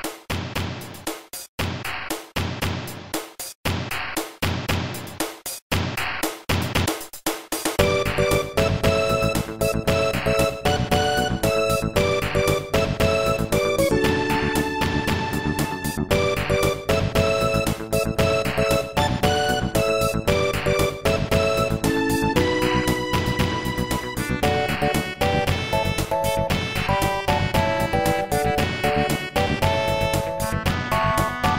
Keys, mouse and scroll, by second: 13.0 right click, 13.5 ctrl+s, 13.7 click, 15.2-16.6 typing, 17.2 click, 27.7 click, 28.7 right click, 29.2 ctrl+s, 29.4 click, 29.5 click, 30.3-30.7 typing.